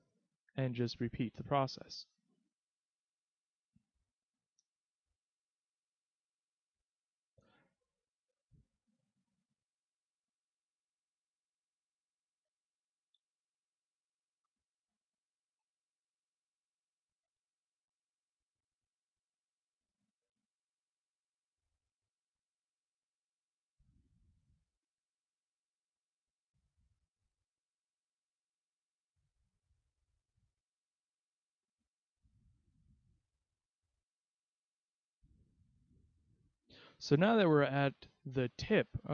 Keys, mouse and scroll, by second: 0.9 click, 2.5 e, 4.2 click, 5.2 ctrl+z, 6.1 e, 8.5 s, 9.5 click, 11.2 click, 12.8 e, 15.1 click, 15.8 s, 16.8 click, 17.4 click, 18.8 e, 21.1 click, 21.7 s, 22.4 click, 23.0 click, 26.0 s, 27.0 click, 28.3 click, 30.0 click, 31.9 e, 34.3 click, 34.6 s, 36.3 click.